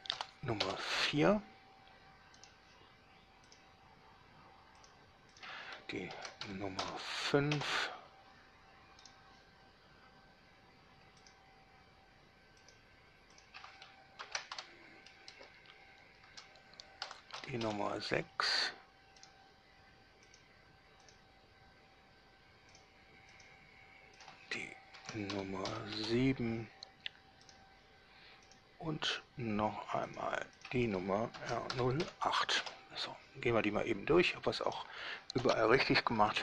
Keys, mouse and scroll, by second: 0.0 0, 0.4 4, 0.8 Return, 2.6 middle click, 2.7 right click, 3.7 drag, 5.0 drag, 5.5 click, 6.4 shift+r, 6.6 0, 7.0 5, 7.7 Return, 9.2 click, 11.4 drag, 12.8 click, 13.5 click, 14.4-17.5 typing, 17.8 Return, 19.4 right click, 20.5 click, 21.2 click, 22.9 click, 23.5 click, 24.4 click, 25.1 shift+r, 25.5 0, 25.8 7, 26.1 Return, 27.7 click, 28.7 click, 30.2 drag, 30.8 click, 31.5 shift+r, 31.9 0, 32.2 8, 32.8 Return, 34.8 click.